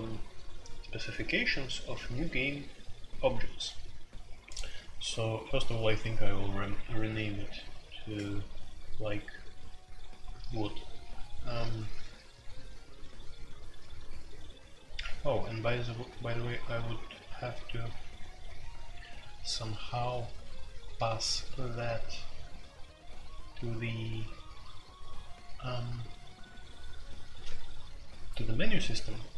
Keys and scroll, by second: 7.1-7.5 typing.